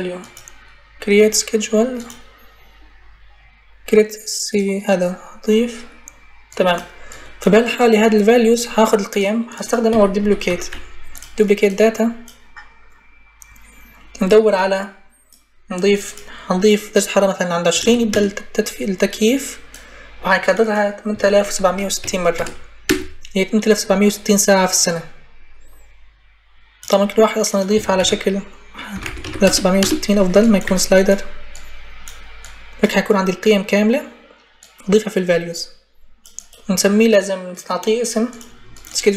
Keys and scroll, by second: 9.4-10.8 typing, 17.3-18.1 typing, 20.6-22.6 typing, 27.8-29.7 typing, 30.4 Delete.